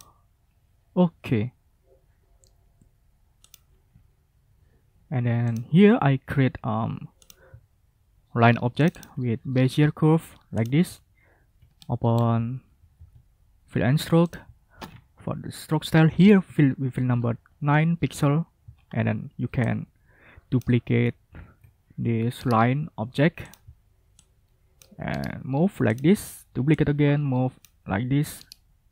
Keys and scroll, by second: 12.7 ctrl+shift+f, 14.8 ctrl+a, 16.0 9, 16.4 Return.